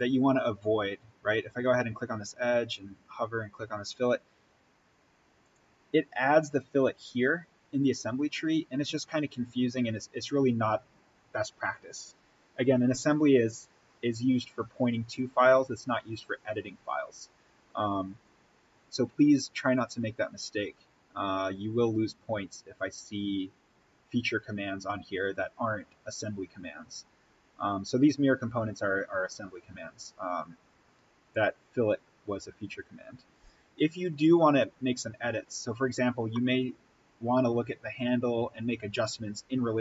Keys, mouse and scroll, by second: 2.6 click, 8.4-9.2 scroll up 1, 13.0 right click, 18.2 click, 20.4-20.9 scroll up 1, 23.4-23.8 scroll down 1, 30.2-32.2 scroll down 1, 32.2-32.5 scroll up 1, 35.6 click, 36.2-39.8 middle drag.